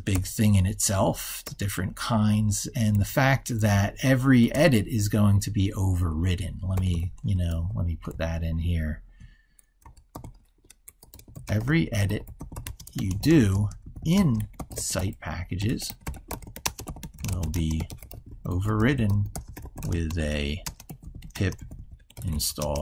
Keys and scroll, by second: 7.6 ctrl+f.